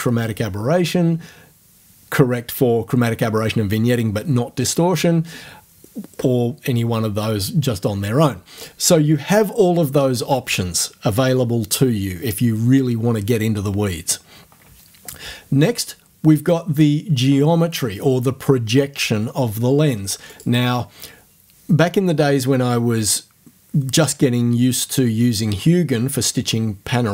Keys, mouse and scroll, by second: 8.6 click, 20.3 click.